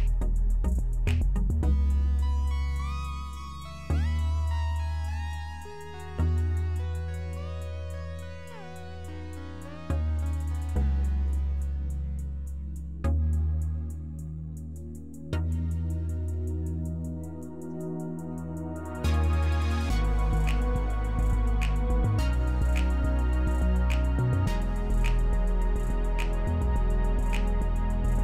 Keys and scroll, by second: 17.8-18.7 typing, 21.7-22.4 typing, 22.5 Return, 24.0-24.7 typing, 24.8 Return, 26.8-27.7 typing.